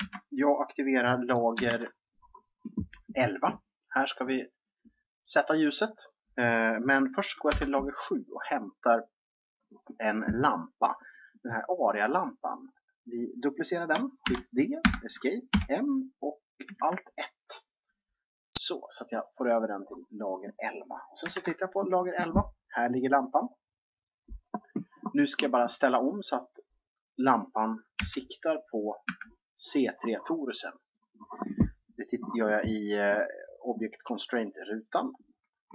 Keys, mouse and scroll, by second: 1.7 alt+1, 5.0-7.5 drag, 7.5 7, 8.2-9.9 drag, 10.1 click, 14.2 shift+d, 15.5 m, 21.2 alt+1, 27.9 g, 30.9-32.7 drag, 32.8-34.8 scroll up 1, 34.8-35.7 drag.